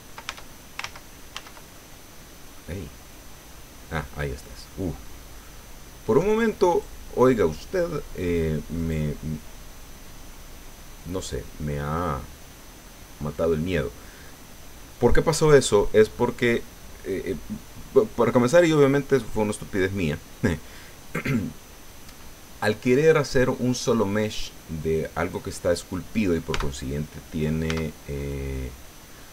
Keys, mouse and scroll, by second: 0.3 ctrl+Tab, 0.8 ctrl+z, 1.8 ctrl+click, 3.7-4.1 scroll down 1, 4.2 click, 4.9-5.3 scroll up 1, 5.4-6.5 drag, 6.7 right click, 8.7 right click, 21.3-23.0 drag, 26.5 Tab, 27.7 Tab.